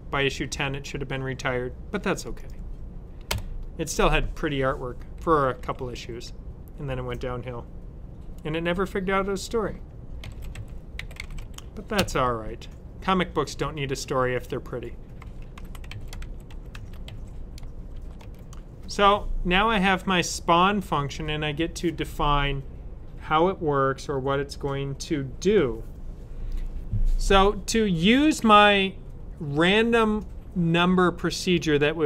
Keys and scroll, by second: 10.1-11.8 typing, 14.8-17.8 typing.